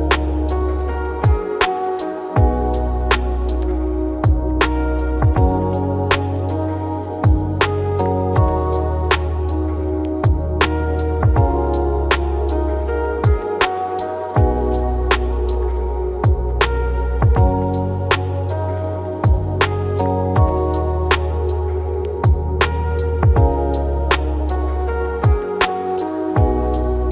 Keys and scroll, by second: 21.9 ctrl+r.